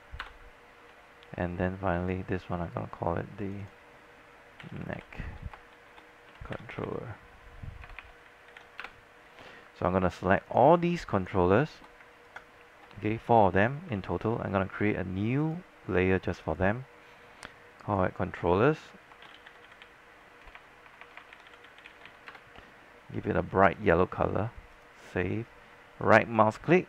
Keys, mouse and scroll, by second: 0.3 Return, 1.3 scroll down 1, 2.1 click, 4.6-9.3 typing, 10.5 click, 12.3 ctrl+click, 13.2-14.0 scroll down 1, 14.2 alt+middle click, 15.5-17.6 drag, 19.2-22.7 typing, 23.8 click, 26.4-26.8 right drag.